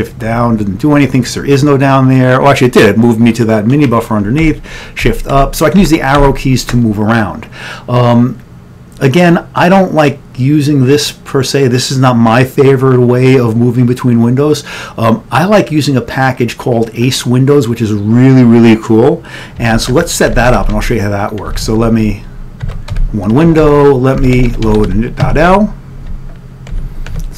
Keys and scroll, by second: 4.5 Up, 5.2 Right, 5.6 Down, 5.9 Up, 6.2 Left, 19.9 ctrl+x, 20.1-22.1 typing, 26.8 ctrl+x.